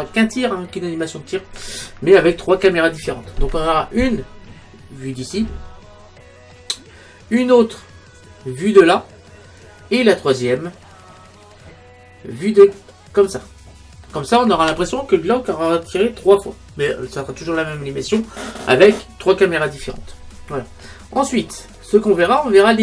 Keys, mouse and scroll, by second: 6.5-8.3 middle drag, 20.9-21.8 scroll up 1, 21.8-22.8 middle drag.